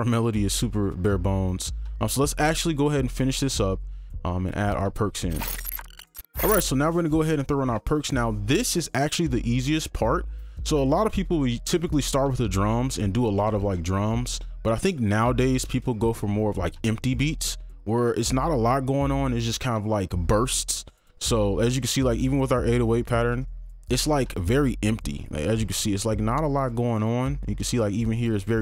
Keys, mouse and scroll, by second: 0.2 scroll down 1, 0.4 scroll up 1, 0.5 scroll down 1, 0.6 scroll up 1, 0.8 scroll down 1, 0.9 scroll up 1, 1.0 scroll down 1, 1.1-3.2 scroll up 1, 21.8 right click, 24.5 ctrl+click, 26.3 ctrl+click, 27.0 ctrl+2, 27.4 ctrl+click.